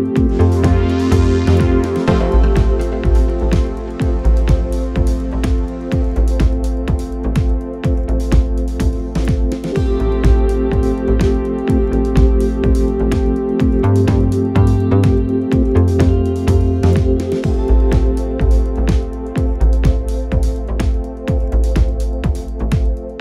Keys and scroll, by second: 21.2 f.